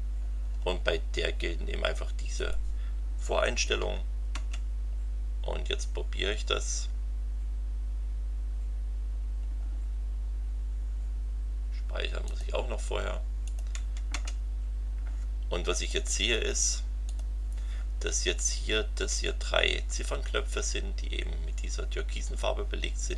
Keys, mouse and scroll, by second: 2.4 click, 3.6 Up, 4.3 Return, 12.2 click, 13.4 click, 13.7 Up, 14.1 Return, 15.9-16.5 drag, 17.0 click.